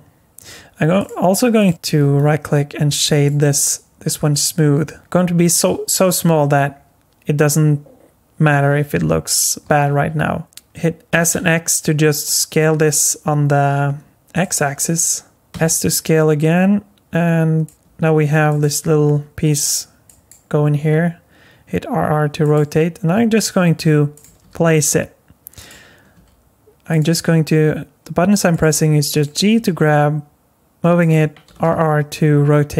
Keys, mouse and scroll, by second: 1.0 click, 1.6 click, 2.0 right click, 5.9-6.5 scroll up 3, 6.5-8.7 scroll down 1, 9.6 s, 11.1 s, 15.5 s, 17.8 g, 18.8 r, 20.7 r, 23.1 g, 24.2 r, 26.1 g, 27.1 r, 28.7 g, 29.5 g, 31.5 r.